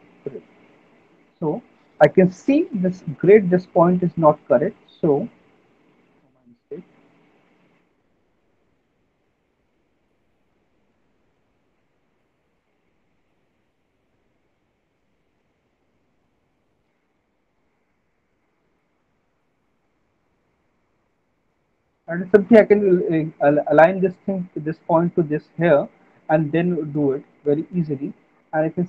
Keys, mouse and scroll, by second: 0.4 click, 1.4 alt+middle click, 6.4 click, 6.6 ctrl+z, 7.8 click, 8.4 click, 10.2 click, 11.9 middle click, 12.1 alt+w, 13.3 alt+w, 14.6 middle click, 15.0 middle click, 16.0 middle click, 16.8 middle click, 17.0 middle click, 17.4 middle click, 22.5 click, 27.7 middle click.